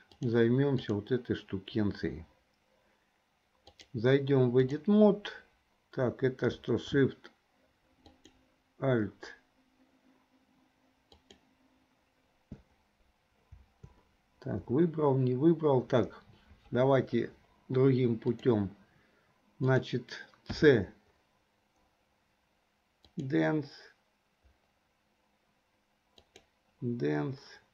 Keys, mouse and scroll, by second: 0.9 click, 3.8-5.0 drag, 8.1 alt+shift+click, 11.2 alt+shift+click, 18.6 click, 19.8 click, 20.5 c.